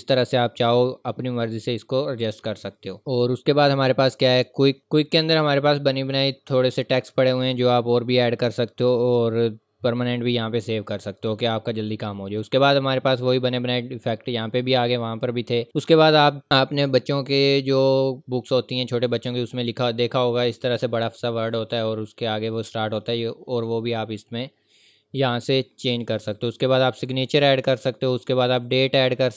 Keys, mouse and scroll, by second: 5.4 click, 7.5-9.6 scroll down 1, 11.1 scroll down 1, 11.1 click, 15.6 click, 26.3 click.